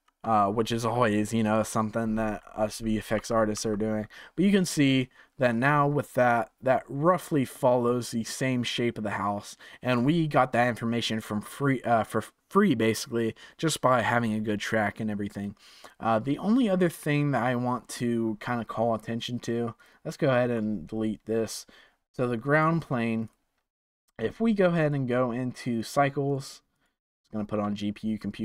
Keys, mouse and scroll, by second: 3.0 Tab, 3.1 Tab, 3.5 Tab, 4.6-6.3 scroll up 1, 6.3-9.4 drag, 14.6-17.7 drag, 19.7 click, 20.5 click, 22.5 click, 23.2 click, 23.7 click, 24.8 click, 25.2-28.4 drag.